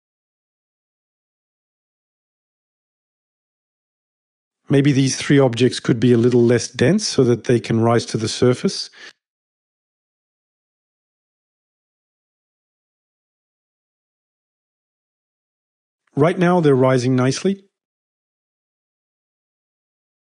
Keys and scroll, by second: 12.0-13.4 typing.